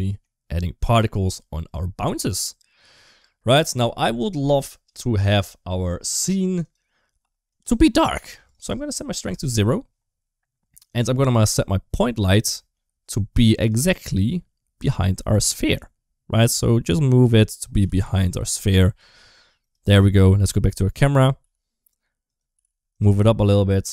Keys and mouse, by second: 0.8 middle click, 1.6 shift+middle click, 3.0 space, 4.5 click, 6.4 click, 7.4 click, 8.4 click, 10.8 click, 11.5 middle click, 12.4 shift+middle click, 13.4 click, 16.3 g, 17.6 g, 20.2 KP_0, 21.2 g, 22.4 g.